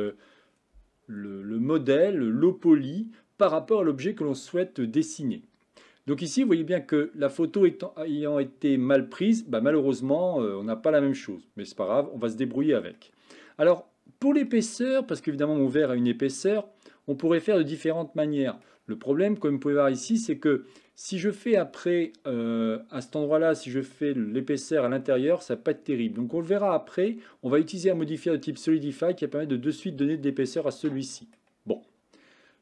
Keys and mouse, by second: 0.0 KP_1, 13.0-14.4 middle drag, 14.6 middle click, 17.4-18.7 middle drag, 20.9 middle click, 25.6-27.1 middle drag, 30.7 middle click.